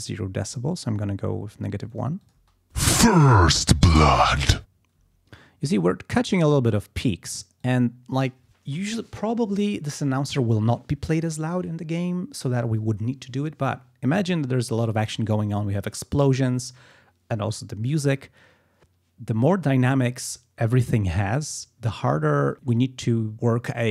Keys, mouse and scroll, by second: 0.0 scroll down 2, 1.1 scroll down 2, 1.9 click, 2.3 space, 5.0 space, 7.6 click.